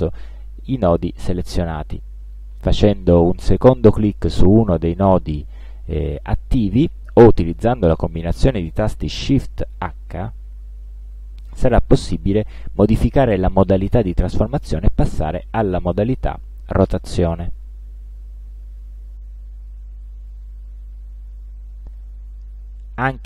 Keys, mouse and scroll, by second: 4.4 click, 9.9 shift+h, 15.1-17.6 drag, 18.2-20.6 drag, 22.0 click, 23.1-23.2 ctrl+drag.